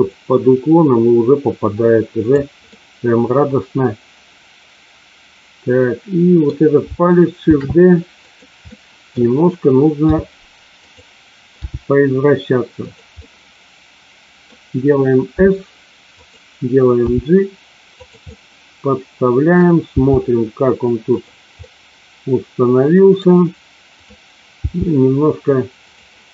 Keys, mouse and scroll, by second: 0.0-2.2 drag, 2.6-6.5 middle drag, 7.4 shift+d, 8.1 click, 8.7 middle click, 10.0 r, 10.7 click, 11.5 g, 12.7 click, 13.1-14.5 middle drag, 16.1 click, 16.1 s, 17.0 g, 17.9 click, 18.2-19.5 middle drag, 21.0 click, 21.6-23.1 middle drag, 24.5 g, 25.7 click.